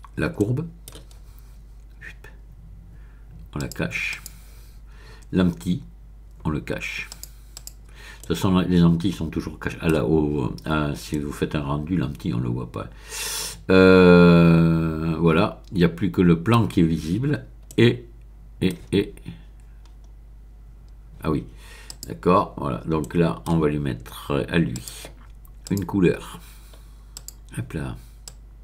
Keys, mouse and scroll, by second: 0.4 middle click, 2.1-3.0 scroll down 1, 3.5 click, 4.1 click, 7.1 click, 8.2-10.6 middle drag, 10.6-11.1 scroll up 1, 11.1 middle click, 16.1 middle click, 17.3-17.6 scroll up 1, 17.6-19.0 middle drag, 19.4-20.8 scroll down 1, 21.9 click, 23.0 middle click, 24.7 click, 25.6 click, 27.1 click, 28.2 click.